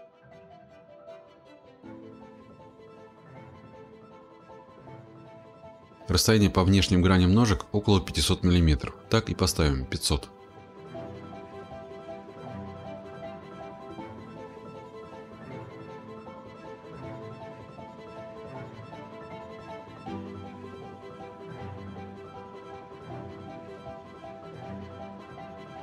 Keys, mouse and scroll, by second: 0.3 middle click, 0.4 middle click, 0.5 middle click, 0.8 middle click, 0.9-1.8 scroll, 1.8 scroll, 3.6-4.2 scroll, 5.6 click, 11.2-12.7 scroll, 15.4-16.2 typing, 17.2 Return, 19.4 click, 21.0-21.6 typing, 22.5 Return, 23.5-24.6 scroll.